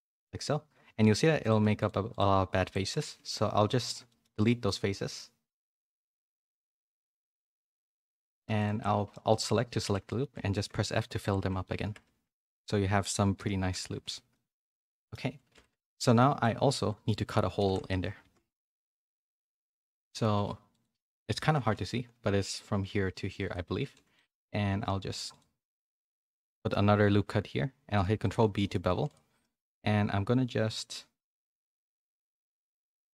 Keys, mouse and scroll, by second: 1.8-2.9 shift+drag, 3.0 x, 3.7 middle click, 4.0 shift+middle click, 4.3 middle click, 7.6 shift+x, 7.6 shift+middle click, 8.6 alt+click, 9.1 middle click, 9.8 f, 10.0 middle click, 10.5 shift+middle click, 11.1 alt+click, 11.4-14.1 typing, 11.6 middle click, 11.8 Tab, 14.3 middle click, 15.7 a, 16.3 Tab, 16.7 ctrl+r, 17.6 ctrl+z, 18.2 KP_3, 18.8 z, 20.3 ctrl+r, 21.7 ctrl+b, 23.8 z, 24.1 middle click, 24.7 ctrl+r, 26.1 middle click, 26.5 middle click, 27.1 ctrl+b, 28.6 middle click, 28.9 3, 29.4-33.0 middle drag.